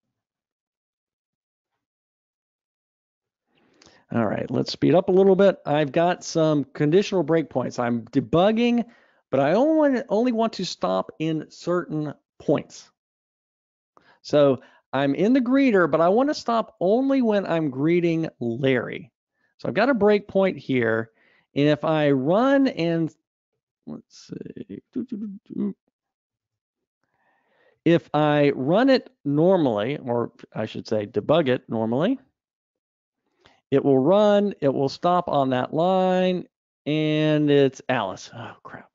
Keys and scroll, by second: 1.1 super+Up, 26.5 super+x.